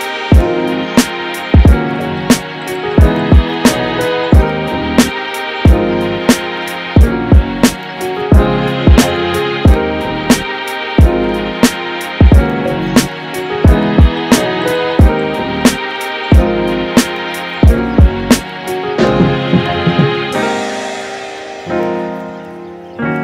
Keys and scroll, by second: 1.8 super+z, 16.7-18.2 typing, 22.3 super+z.